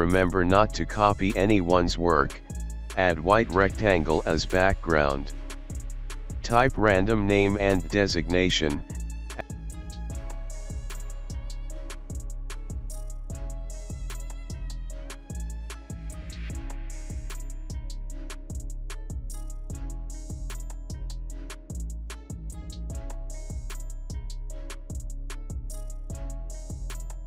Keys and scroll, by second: 0.7 alt+space, 1.3 alt+space, 2.4 space, 4.8 alt+space, 6.2-7.4 typing, 9.8 alt+space, 10.4-11.5 typing, 11.1 ctrl+a, 11.7 Down, 12.0 alt+space, 12.1 alt+space, 12.3 ctrl+t, 13.5 alt+shift+space, 14.4-15.6 typing, 17.6 ctrl+z, 21.5 space, 24.8 alt+space, 24.8 alt+space.